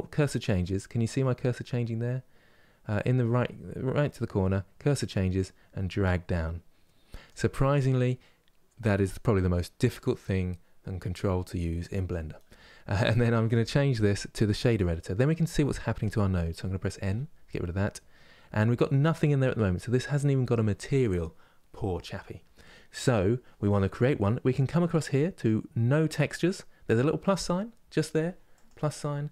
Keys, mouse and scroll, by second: 6.9-16.8 drag, 16.8 n.